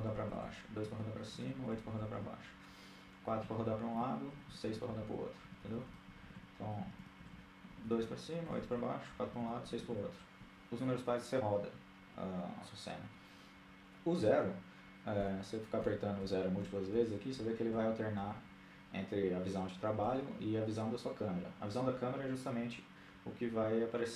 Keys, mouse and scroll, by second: 0.0-2.2 typing, 3.3-9.7 typing, 14.9-17.9 typing, 19.9 KP_0.